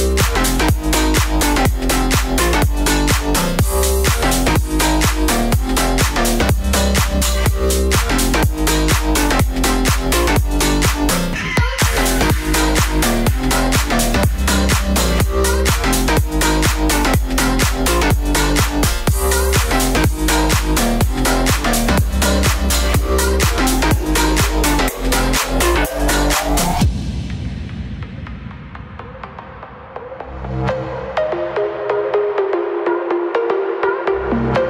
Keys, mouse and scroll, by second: 0.8 a, 1.2 right click, 2.4 right click, 2.8 click, 3.3 a, 4.1 right click, 4.6 a, 4.7 right click, 5.1 f, 5.4 a, 5.8 right click, 6.2 click, 7.2 middle click, 7.9 space, 8.0 right click, 8.0 o, 9.1 right click, 9.5 click, 10.3 click, 12.6 middle click, 12.7 right click, 13.3 click, 13.7 right click, 13.8 click, 14.0 middle click, 14.5 a, 14.9 right click, 15.5 right click, 16.4 right click, 16.7 g, 18.7 right click, 19.8 right click, 20.4 f, 20.5 a, 20.8 right click, 22.3 middle click, 23.7 right click, 24.0 x, 24.9 right click, 25.1 click, 25.5 right click, 25.8 click, 27.1 right click, 27.6 j, 27.8 a, 29.2 Tab, 30.5 click, 31.0 Tab, 31.5 right click, 31.9 click, 32.3 middle click, 32.9 right click, 33.2 click, 34.3-34.6 right drag.